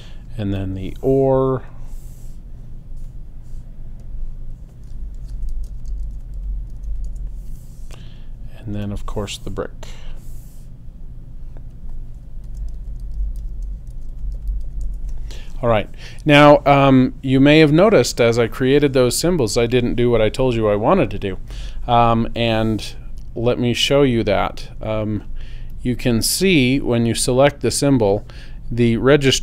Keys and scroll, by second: 4.9-7.4 typing, 12.2-15.1 typing.